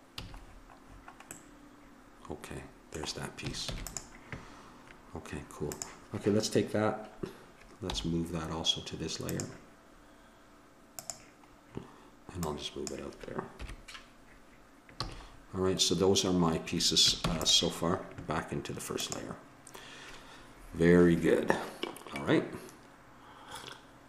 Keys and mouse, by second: 0.1 a, 3.7 ctrl+s, 5.7-7.5 drag, 7.8 m, 10.9 click, 13.6 KP_1, 15.0 a, 17.2 ctrl+s, 19.0-20.8 drag.